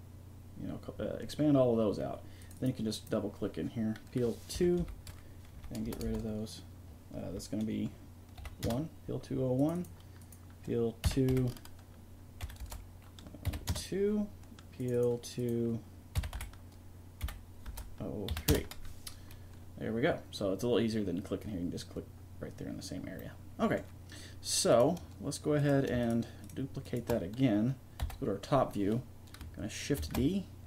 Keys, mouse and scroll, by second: 2.4-8.0 drag, 9.6-11.7 drag, 14.8-16.8 drag, 23.2-24.7 middle drag, 24.7-26.8 drag, 28.0 KP_7, 30.0 shift+d.